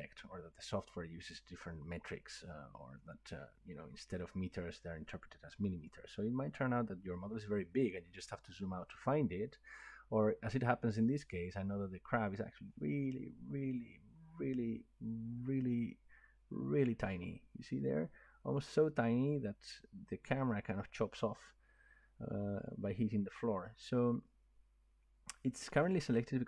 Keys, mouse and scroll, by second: 6.7 middle click, 7.1-9.0 scroll down 19, 9.3 scroll up 1, 9.4 scroll, 10.0 scroll, 10.9-13.6 scroll, 14.0 scroll, 14.9-16.2 scroll, 16.2 scroll, 16.4-16.9 scroll up 12, 17.1-17.6 scroll down 3, 17.9 scroll up 1, 18.3-19.0 scroll down 1, 19.0-19.5 scroll down 1.